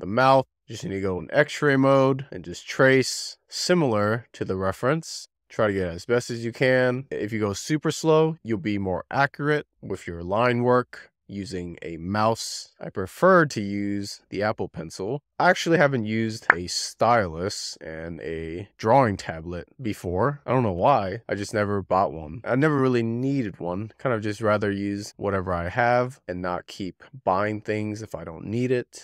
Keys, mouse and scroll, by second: 0.5 alt+z, 2.1-3.4 drag, 3.6 z, 4.2-5.5 shift+middle drag, 5.5-6.1 scroll up 3, 8.3 f, 10.2 f, 12.2-14.8 drag, 15.0 z, 16.1-19.5 drag, 24.9-25.6 scroll down 7, 25.7-27.2 middle drag, 27.2 scroll down 1, 27.5-29.0 shift+middle drag.